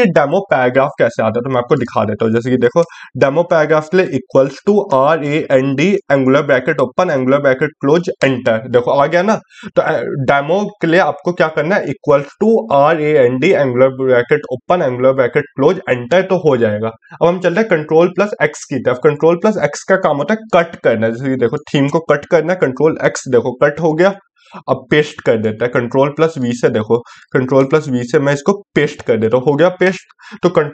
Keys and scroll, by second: 16.9 ctrl+x.